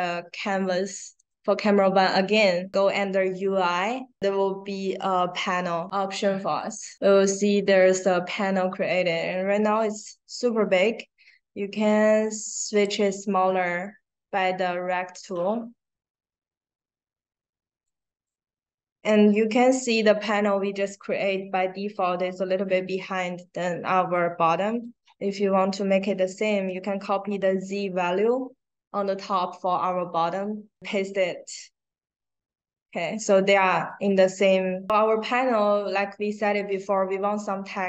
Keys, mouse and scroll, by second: 1.1 right click, 6.6 click, 12.6 click, 15.0-17.8 drag, 18.2-18.7 drag, 24.6 click, 26.1 click, 31.2 drag, 33.8 click, 35.4 click, 36.4 click.